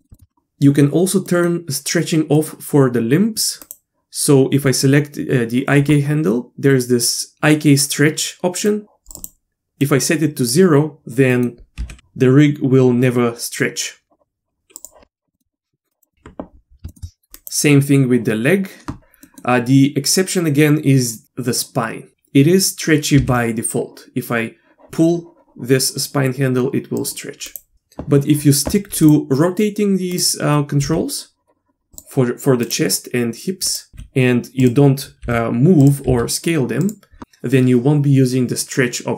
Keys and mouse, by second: 0.0 middle click, 0.1 shift+middle click, 1.3 middle click, 2.4 middle click, 3.6 click, 8.7 click, 9.9 click, 11.3 middle click, 11.8 g, 15.3 middle click, 15.9 click, 16.1 middle click, 16.9 shift+middle click, 19.2 middle click, 23.2 g, 27.5 click, 27.7 g, 29.0 click, 30.1-30.5 drag, 30.8 r, 33.6 click, 33.9 r, 35.2 g, 36.1 s.